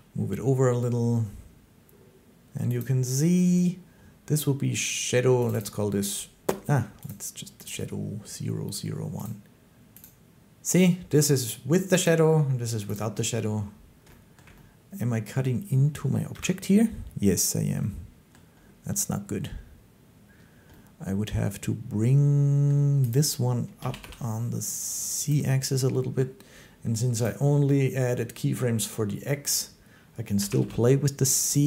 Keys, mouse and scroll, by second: 2.7 click, 5.3 click, 5.4 click, 6.9 click, 7.5 click, 9.1 click, 9.9 click, 11.9 click, 12.8 click, 14.2 shift+middle click, 15.2 middle click, 16.2 1, 23.0 click, 23.0 middle click, 23.7 g, 25.2 click, 30.3 g, 30.5 z, 31.3 click.